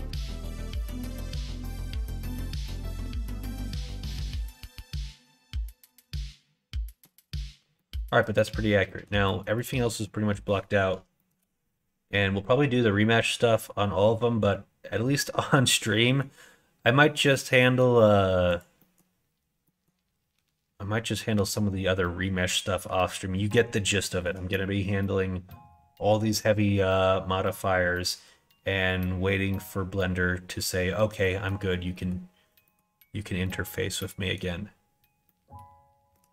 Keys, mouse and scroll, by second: 0.0 /, 0.7-6.9 middle drag, 7.7 middle click, 8.8 middle click, 9.6 middle click, 11.1 shift+middle click, 15.8 middle click, 17.2 middle click, 18.5 click, 18.7 middle click, 19.5 middle click, 21.2 middle click, 23.9 shift+middle click, 26.8 click, 31.1 middle click, 31.8 middle click, 32.5 middle click, 33.4 middle click, 35.1 middle click.